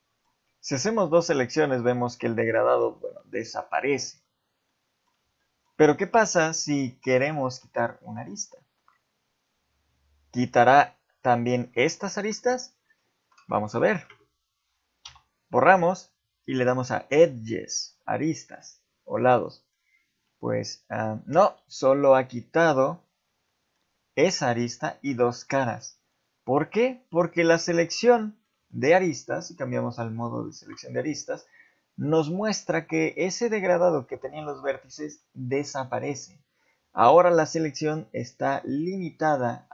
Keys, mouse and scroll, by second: 3.9 shift+middle click, 4.7 middle click, 5.4 shift+middle click, 5.9 middle click, 6.9 shift+middle click, 8.4 shift+middle click, 15.0 x, 19.3 middle click, 21.4 z, 21.8 middle click, 22.4 ctrl+z, 22.9 middle click, 27.3 click, 27.8 z, 28.1 middle click, 28.7 shift+middle click, 31.7 middle click, 35.5 middle click, 37.0 shift+middle click, 37.8 click, 38.7 click, 39.3 click.